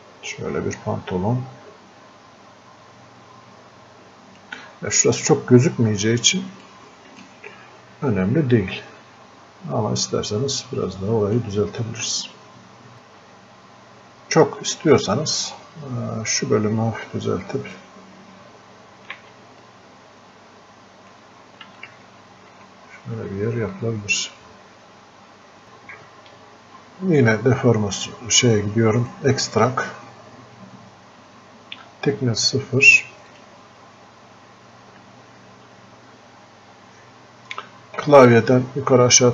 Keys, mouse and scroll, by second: 6.7-10.7 drag, 10.7-12.9 drag, 12.9-15.6 drag, 15.6-19.2 ctrl+drag, 19.2 ctrl+z, 19.9-21.2 ctrl+drag, 22.1 click, 24.1 alt+click, 27.3-31.4 drag, 33.3 click.